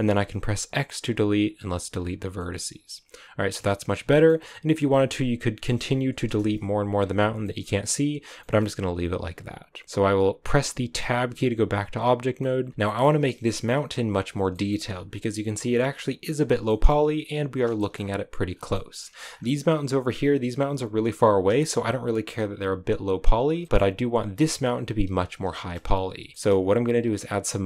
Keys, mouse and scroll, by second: 1.5 x, 1.8-2.3 scroll down 3, 2.3-3.7 middle drag, 3.7-4.2 scroll up 5, 4.0 shift+middle click, 4.6 scroll down 2, 4.8-6.2 middle drag, 6.2 KP_0, 6.9-7.3 scroll up 1, 7.3 shift+middle click, 7.5-8.0 scroll up 2, 8.0-8.3 scroll down 1, 8.3-10.9 shift+middle drag, 10.9 Tab, 11.4 a, 11.9 right click, 12.3 middle click, 12.7 KP_0, 12.8 shift+middle click, 13.0-14.2 scroll up 2, 14.2 right click, 14.4 shift+middle click, 14.8-15.8 scroll up 4, 15.8-16.6 scroll down 4, 16.6-17.8 shift+middle drag, 17.8-18.4 shift+scroll up 3, 18.4 scroll down 3, 18.6 shift+middle click, 19.3-20.9 scroll up 5, 20.9 right click, 21.6 a, 23.3 scroll down 1, 23.5 shift+middle click, 24.3 right click, 25.1 a, 25.4-27.6 shift+middle drag.